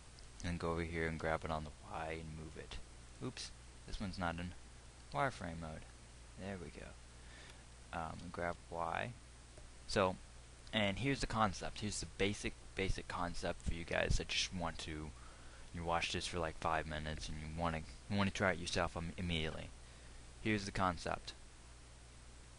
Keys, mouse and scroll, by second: 1.6 g, 3.7-5.5 drag, 5.5 z, 8.8 g, 10.1 click.